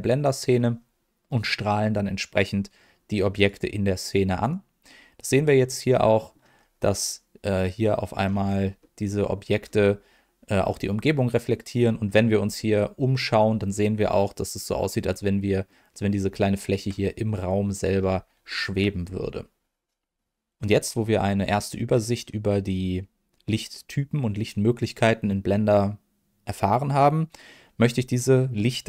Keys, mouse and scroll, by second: 3.3-4.5 drag, 5.5 middle click, 6.5 scroll up 1, 7.5 middle click, 7.5 scroll up 2, 8.2-8.6 scroll down 2, 8.8 middle click, 9.6 scroll up 2, 11.1 middle click, 12.0-12.5 scroll down 3, 12.5 middle click, 14.7 scroll down 1, 15.1 middle click, 16.4 shift+middle drag, 17.9 scroll up 1, 18.4 shift+middle click, 19.0 scroll up 1, 19.5-20.0 scroll up 1.